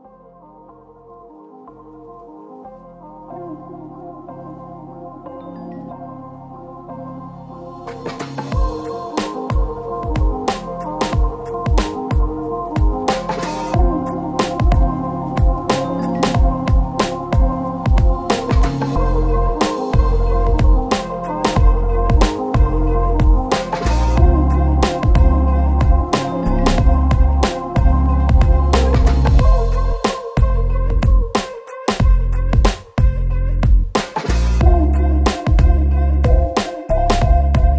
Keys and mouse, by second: 0.0 middle click, 0.8 middle click, 0.9 KP_Divide, 1.1 Tab, 1.2 shift+click, 1.3 middle click, 1.6 middle click, 2.0 Tab, 2.2 alt+shift+click, 2.6 shift+middle click, 3.4 ctrl+KP_Add, 3.4 ctrl+click, 3.6 ctrl+KP_Add, 3.8 alt+shift+click, 4.6 alt+shift+click, 4.9 shift+click, 5.1 x, 5.5 x, 5.6 x, 5.8 alt+shift+click, 6.1 x, 6.2 shift+click, 6.3 shift+middle click, 7.1 x, 7.4 middle click, 7.4 x, 7.7 ctrl+KP_7, 8.0 ctrl+middle click, 8.3 Tab, 8.5 shift+middle click, 8.5-10.0 typing, 8.9 shift+middle click, 9.0 shift+middle click, 9.6 Tab, 9.8 ctrl+KP_Add, 10.3 ctrl+KP_Add, 10.8 ctrl+z, 11.0-17.6 typing, 11.4 shift+middle click, 11.9 shift+middle click, 12.1 shift+middle click, 12.3 shift+middle click, 12.7 shift+click, 13.3 alt+click, 13.7 shift+click, 15.4 Tab, 16.0 alt+click, 16.2 Tab, 16.3 ctrl+x, 16.6 ctrl+x, 16.6 middle click, 16.8 Tab, 17.3 KP_Divide, 18.5 KP_Divide, 18.5 click, 18.8 Tab, 18.9 alt+shift+click, 19.1 f, 19.3 ctrl+z, 19.3 x, 19.6 Tab, 19.7 alt+shift+click, 19.9 f, 20.2 alt+shift+click, 20.4 f, 20.6 Tab, 20.6 ctrl+x, 20.8 ctrl+x, 20.8 ctrl+x, 20.9-21.4 ctrl+x, 21.1 shift+click, 21.4 ctrl+click, 22.0 ctrl+x, 22.3 ctrl+x, 22.4 ctrl+x, 22.7 ctrl+x, 22.8 ctrl+x, 23.0-23.5 ctrl+x, 23.9 Tab, 23.9 a, 24.1 3, 24.2 KP_Divide, 24.3 shift+middle click, 24.4 a, 24.6 a, 25.0 KP_Divide, 25.4 ctrl+z, 25.6 Tab, 25.7 Tab, 26.0 alt+middle click, 26.2 ctrl+z, 26.3 ctrl+click, 26.4 ctrl+x, 26.4 middle click, 26.5 Tab, 26.6 Tab, 26.8 alt+shift+click, 27.0 ctrl+x, 27.3 ctrl+z, 27.3 a, 27.3 a, 27.8 Tab, 28.3 a, 28.7 Tab, 28.9 ctrl+alt+click, 29.1 ctrl+x, 29.1 ctrl+z, 29.4 alt+shift+click, 29.5 ctrl+x, 29.8 ctrl+alt+shift+click, 30.0 ctrl+shift+KP_Add, 30.2 q, 30.4 ctrl+x, 30.6 ctrl+alt+shift+click, 30.8 ctrl+shift+KP_Add, 31.0 ctrl+shift+KP_Add, 31.0 q, 31.1 ctrl+x, 31.1 ctrl+click, 31.8 ctrl+x, 31.9 Tab, 32.0 KP_Divide, 32.1 a, 32.2 shift+click, 32.5 Tab, 32.5 middle click, 32.7 Tab, 32.7-34.3 drag, 32.8 Tab, 34.0 Tab, 34.1 KP_Divide, 34.2 Tab, 34.4 alt+shift+middle click, 35.0 alt+shift+click, 35.0-36.1 alt+shift+middle drag, 35.2 ctrl+shift+x, 35.6 q, 35.7 ctrl+x, 35.9 Tab, 36.1 click, 36.3 ctrl+z, 36.6 shift+click, 36.6 a, 36.9 click, 37.0 Tab, 37.3 a, 37.5 alt+shift+click.